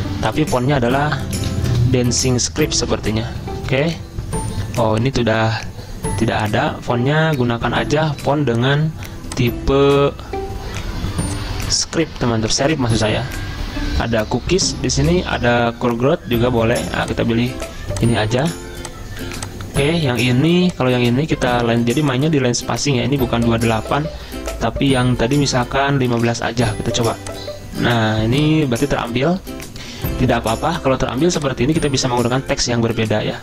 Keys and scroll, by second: 1.2-3.7 typing, 6.4-8.8 typing, 7.7 ctrl+z, 26.0-28.0 typing, 28.1 ctrl+z.